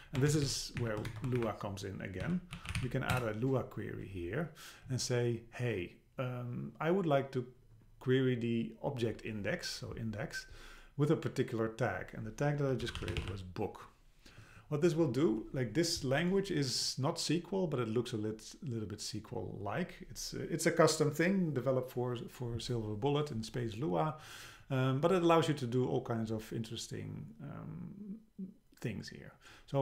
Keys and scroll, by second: 0.3 shift+Down, 0.8 shift+Up, 1.1 shift+super+Right, 1.4 BackSpace, 3.1 Return.